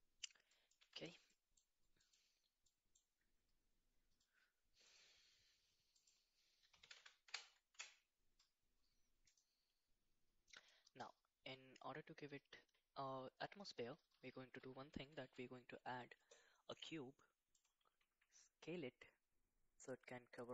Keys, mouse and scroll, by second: 0.5 middle click, 0.8 Tab, 2.0 middle click, 4.8 click, 6.0-7.8 drag, 6.9 KP_0, 10.4 middle click, 15.2 shift+a, 19.4 s.